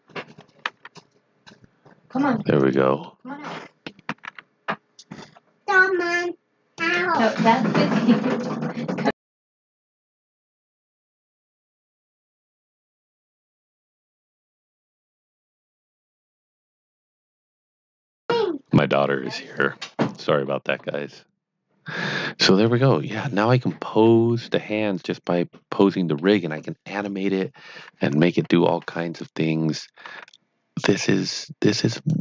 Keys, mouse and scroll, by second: 0.5 r, 2.5 click, 3.0 middle click, 3.8-4.7 typing, 6.4-7.2 typing, 6.8 click, 9.1 click, 18.2 click, 20.6 click, 22.3 middle click, 23.0 KP_1, 24.1 middle click, 28.2 KP_3, 30.0 r, 31.9 click.